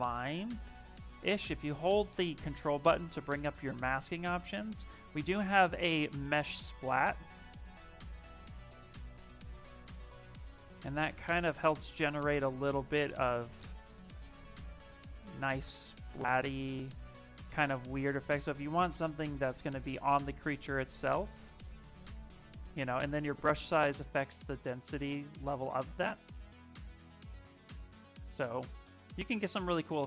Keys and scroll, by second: 8.3 s, 14.6 ctrl+z, 19.0 s, 22.3 s, 25.8 s, 28.7 ctrl+z, 29.0 ctrl+z, 29.5 ctrl+z.